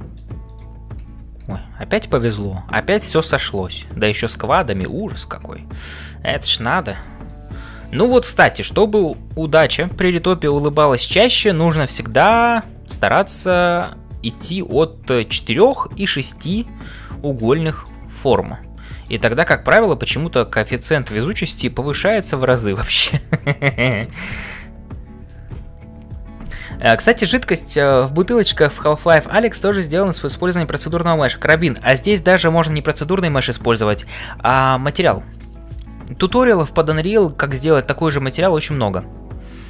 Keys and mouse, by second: 0.0-39.6 typing, 0.4 click, 4.3 ctrl+s, 5.0 shift+middle click, 5.7-7.0 middle drag, 12.1-15.6 middle drag, 17.5 shift+middle click, 18.1-19.2 middle drag, 20.8 click, 21.2 middle click.